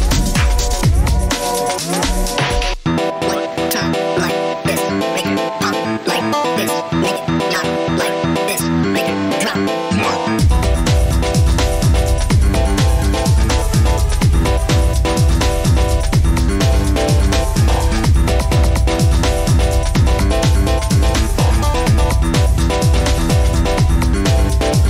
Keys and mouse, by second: 5.7 Tab, 6.5 click, 7.0 click, 8.1-8.4 middle drag, 8.9-9.8 drag, 9.8-13.9 middle drag, 14.0-18.4 middle drag, 18.7-20.8 middle drag.